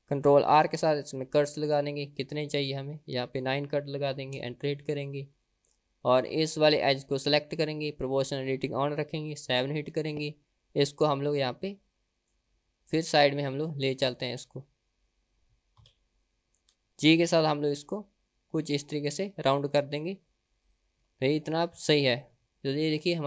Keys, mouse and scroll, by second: 0.6 ctrl+r, 3.4-5.0 drag, 5.4-5.8 middle drag, 6.5 click, 9.5 KP_7, 11.5 middle click, 13.1 click, 15.8 KP_7, 17.2 g, 22.3-23.2 middle drag.